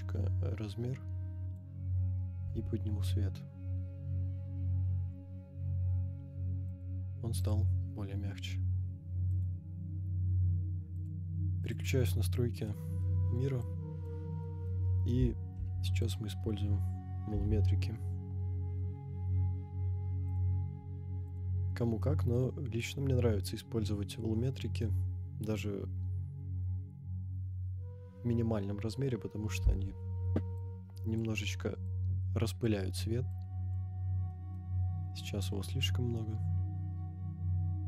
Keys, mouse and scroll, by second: 2.3 g, 2.4 z, 6.8 click, 7.4 click, 8.5 scroll down 1, 9.3 click, 10.9-11.7 drag, 12.6-13.1 middle drag, 13.7 click, 14.4 middle drag, 15.6 shift+a, 22.0 middle click, 30.5 click, 31.8-32.8 drag, 33.4 click, 34.3 middle drag, 34.7 scroll up 2, 35.4-37.8 drag, 35.4-36.3 scroll up 1.